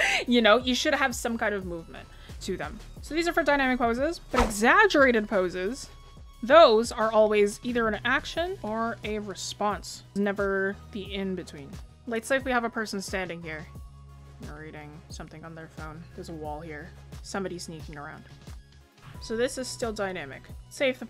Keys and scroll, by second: 9.9 ctrl+z, 11.2 ctrl+z, 11.9 ctrl+z, 13.7 ctrl+z.